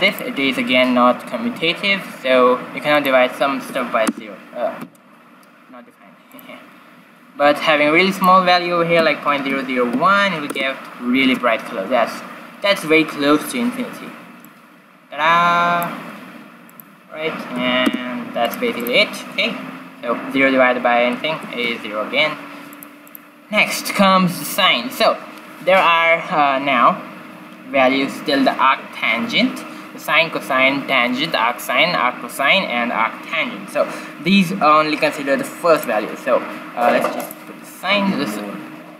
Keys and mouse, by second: 2.9-4.7 drag, 6.3-8.0 drag, 8.1-9.4 drag, 9.4 0, 9.8 click, 14.4-16.3 drag, 16.6-20.5 drag, 23.0-24.9 drag, 35.7-37.6 drag.